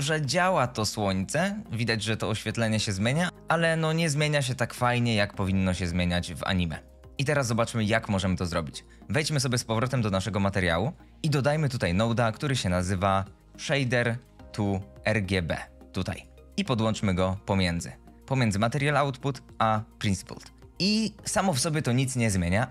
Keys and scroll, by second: 12.4 shift+a, 13.5-14.3 typing, 14.5 Down.